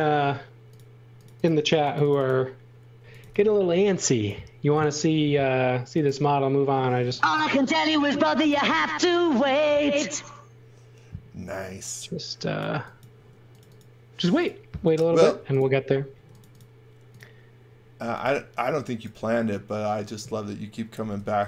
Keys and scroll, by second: 2.8-3.7 typing, 5.2 s, 8.0-9.0 typing, 12.7 x, 13.1 space, 15.1-16.1 typing, 17.7-18.7 typing, 21.1 r.